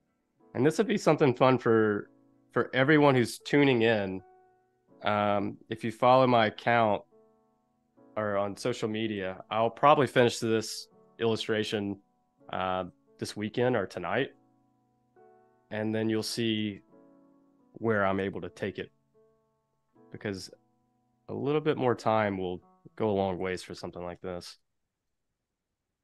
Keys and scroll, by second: 4.2 super+z, 5.5 super+y, 6.2 super+y, 8.8 space, 10.8 super+-, 12.5 super+=, 13.4 super+-, 14.3 super+=, 15.5 super+-, 16.7 space, 18.2 v, 23.4 super+c, 23.9 Escape, 24.5 space, 25.7 super+v.